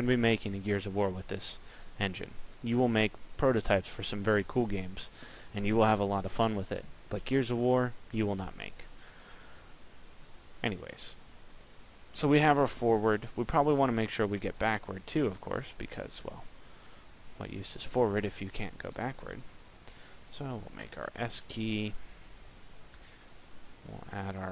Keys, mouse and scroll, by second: 14.8 click, 23.8 click.